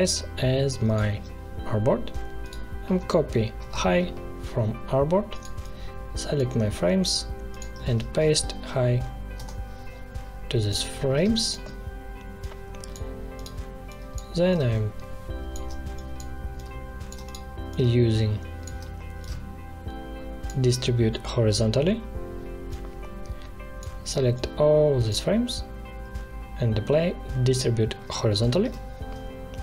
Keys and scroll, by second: 3.5 ctrl+c, 7.8 ctrl+v, 9.3 Return, 11.2 space, 28.5 ctrl+shift+h.